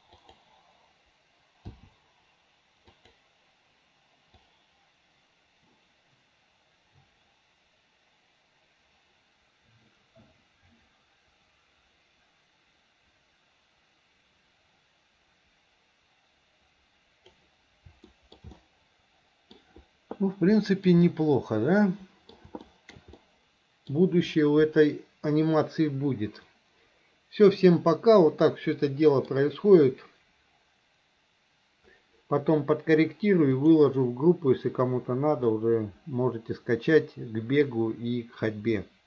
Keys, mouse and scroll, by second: 0.2 click, 1.7 i, 3.0 click, 4.5-17.5 drag, 18.1 shift+middle click, 18.6-19.6 middle drag, 20.6 shift+middle drag, 21.1-22.4 middle drag, 22.7 shift+middle click, 23.2 middle click, 28.5 middle click, 33.6 click, 35.6-37.7 middle drag, 38.9 middle click.